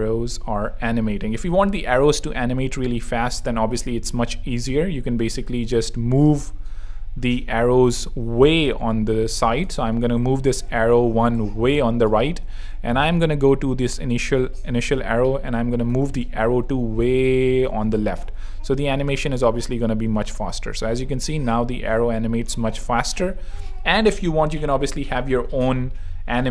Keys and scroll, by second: 3.0 super+2, 5.0 z, 5.6 super+z, 9.7 shift+Right, 13.1 shift+super+Right, 16.5 shift+Left, 18.1 shift+super+Left, 18.2 shift+super+3, 19.0 super+3.